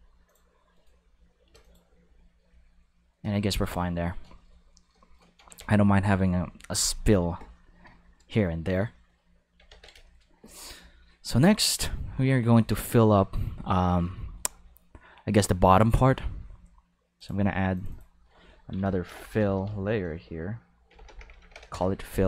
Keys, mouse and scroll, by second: 0.3 click, 0.7 right click, 0.9 g, 1.6 click, 5.5 ctrl+s, 8.1 shift+middle click, 8.9 shift+middle click, 9.7 ctrl+s, 10.0 shift+middle click, 12.5 ctrl+s, 15.8 click, 17.2 click, 17.7 click, 18.8-19.6 typing, 20.9 shift+b, 21.0 shift+o, 21.3 shift+t, 21.5 shift+m, 21.7 Return.